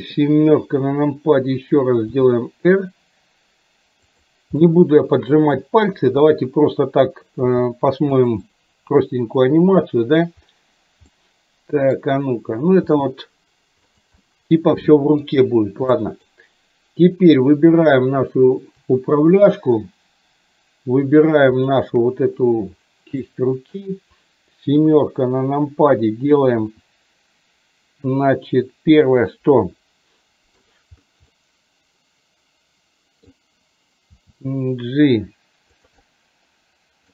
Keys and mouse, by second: 0.6 KP_7, 2.2 r, 4.7 middle click, 7.6 g, 8.5-10.3 middle drag, 11.2 middle click, 12.8 g, 14.2 middle click, 16.1 middle click, 21.7 shift+click, 23.3 middle click, 24.8 KP_7, 26.7 r, 29.6-30.7 middle drag, 31.3-33.3 middle drag, 34.0 g, 36.1-37.1 middle drag.